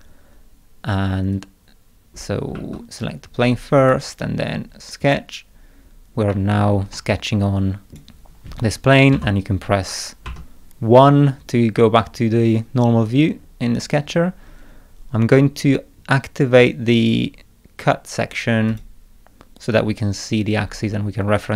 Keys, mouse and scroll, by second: 1.4-3.0 drag, 2.6 Escape, 3.8 click, 5.0 click, 6.3 middle click, 7.0-8.0 middle drag, 7.1 click, 9.2 0, 10.3 1, 13.0 scroll down 1, 13.4 middle click, 18.7 click.